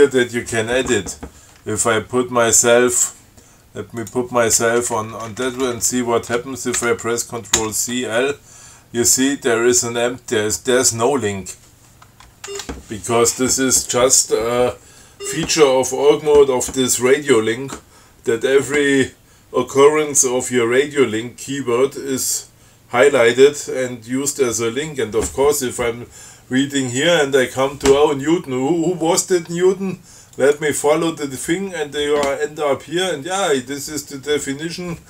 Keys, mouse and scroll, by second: 4.2 click, 4.8 Right, 7.0 ctrl+c, 7.8 ctrl+l, 12.7 ctrl+g, 15.1 scroll up 2, 25.8 scroll down 2, 30.6 click.